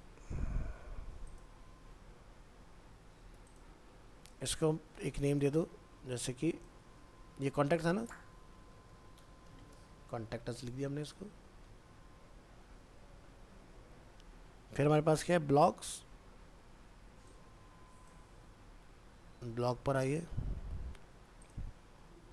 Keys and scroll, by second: 1.9 ctrl+s, 11.6 ctrl+s, 18.3 ctrl+c.